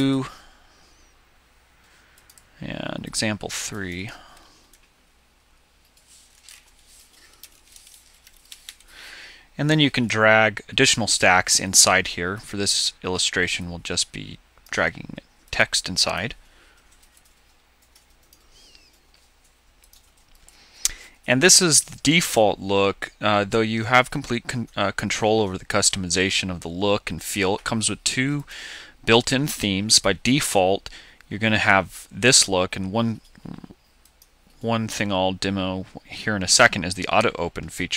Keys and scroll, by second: 4.9 BackSpace, 6.6 BackSpace, 7.8 space.